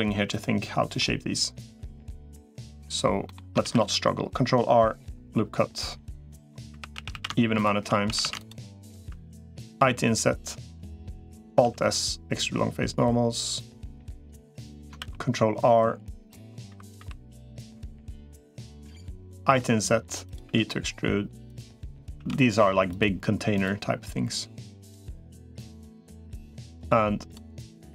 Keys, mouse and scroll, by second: 3.0 middle click, 3.4 ctrl+r, 6.6 3, 6.8 a, 7.0 a, 8.0 a, 8.2 alt+shift+click, 9.6 i, 11.4 alt+s, 14.8 ctrl+r, 16.6 3, 16.8 3, 19.2 i, 20.4 e, 22.0 a, 22.2 g, 23.4 click, 24.5 middle click, 26.3 middle click, 27.6 click.